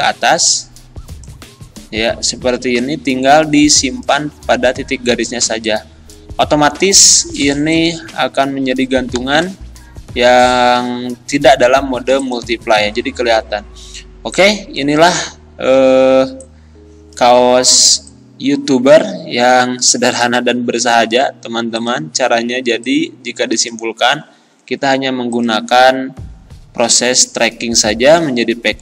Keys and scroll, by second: 9.2 z.